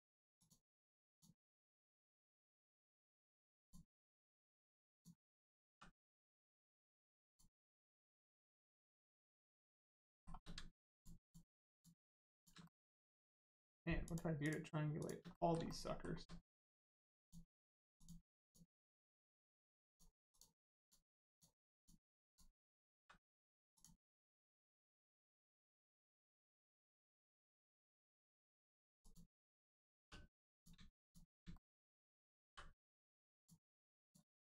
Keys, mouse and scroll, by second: 0.3 shift+click, 1.1 shift+click, 1.6 shift+click, 2.0 middle click, 3.5 shift+click, 4.3 shift+click, 4.9 shift+click, 7.2 click, 8.0 shift+middle click, 8.5 middle click, 8.6 middle click, 8.8 scroll up 1, 9.6 shift+middle click, 10.9 shift+click, 11.2 shift+click, 11.6 shift+click, 12.6 click, 12.6 middle click, 12.9 shift+middle click, 14.0 shift+click, 15.2 middle click, 15.3 middle click, 15.6 shift+middle click, 17.2 shift+click, 17.9 shift+click, 18.4 shift+click, 18.8 middle click, 19.8 shift+click, 20.3 shift+click, 20.7 shift+click, 21.2 shift+click, 23.7 click, 24.3 scroll down 1, 25.0 middle click, 25.3 scroll down 1, 25.9 middle click, 26.2-26.6 scroll down 1, 26.7 middle click, 28.9 click, 29.4 middle click, 29.9 1, 30.5 click, 31.0 shift+click, 31.5 shift+middle click, 34.0 click.